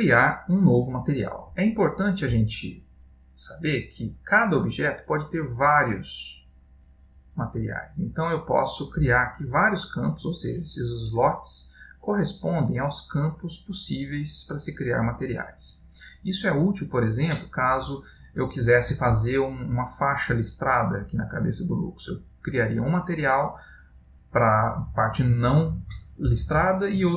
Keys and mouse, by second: 5.6 click, 12.0 click.